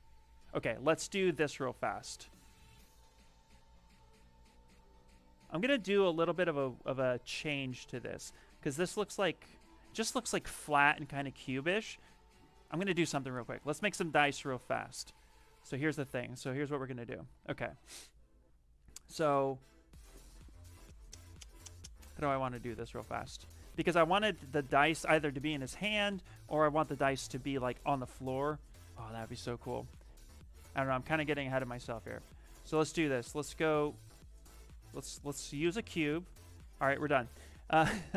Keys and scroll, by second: 16.7 shift+f, 16.9 shift+f.